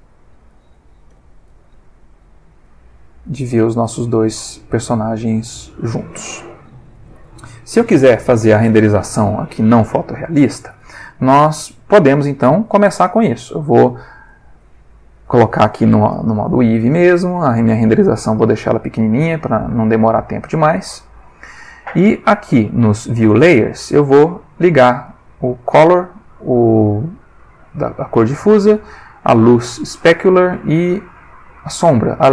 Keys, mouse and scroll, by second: 0.5 click, 1.1 g, 1.5 z, 3.2 click, 3.4 g, 5.9 click, 6.7 ctrl+middle click, 7.2 ctrl+s, 14.3 click, 15.2 click, 16.9 click, 19.1 click, 21.2 click, 25.4 click, 29.2 click, 31.5 click.